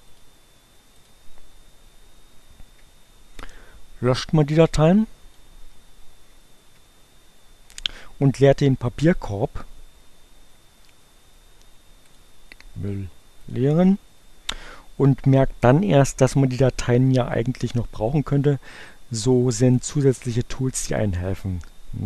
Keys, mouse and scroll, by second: 0.1 click, 0.8 click, 4.8 click, 6.7 Delete, 10.6 right click, 11.9 click, 13.4 click.